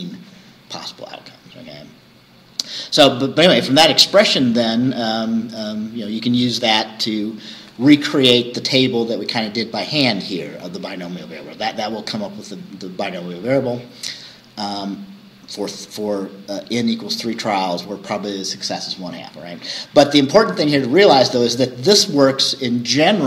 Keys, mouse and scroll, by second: 0.8-3.1 scroll down 2, 3.1-5.3 scroll down 1, 5.3-7.4 scroll down 1, 7.4-8.2 scroll down 1, 8.2-8.6 scroll up 2, 10.8-11.2 scroll down 2, 11.8 scroll down 2.